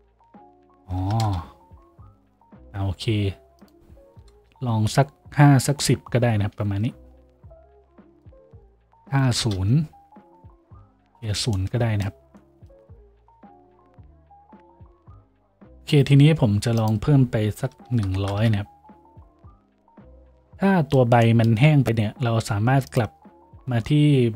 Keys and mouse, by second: 18.1 KP_0.